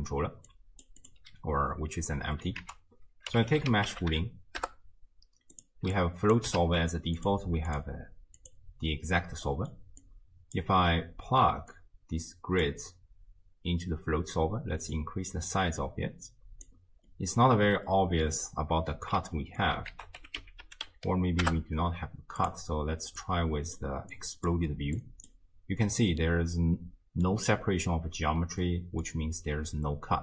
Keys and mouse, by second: 0.5-0.9 drag, 1.0 click, 2.7 ctrl+a, 4.1 o, 6.0 click, 6.6 ctrl+shift+d, 7.7-8.5 drag, 9.5 middle drag, 10.1-10.7 drag, 11.8-12.8 drag, 15.0-16.7 drag, 17.1 middle click, 18.0-18.3 middle drag, 19.4 middle drag, 19.9 ctrl+a, 23.2-23.8 drag, 24.1-24.5 drag, 25.0-25.3 drag, 26.2-27.3 middle drag, 28.6 middle click.